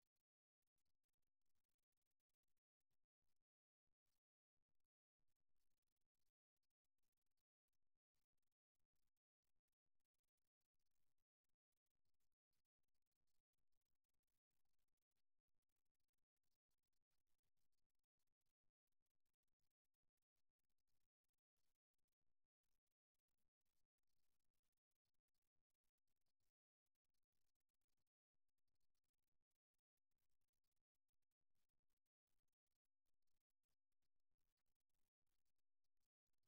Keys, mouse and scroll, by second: 6.6-9.2 right drag, 14.8-16.4 right drag, 16.6 right click, 17.7 right click, 21.3 right click, 22.2 click, 23.1-25.2 right drag, 24.5 f, 25.7 middle click, 27.7-31.2 middle drag, 32.3-34.0 right drag, 34.0 f, 35.2 f.